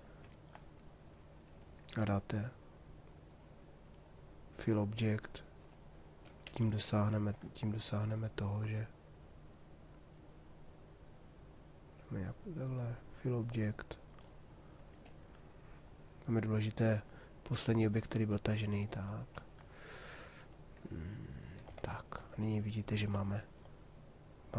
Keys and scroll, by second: 6.2 shift+f.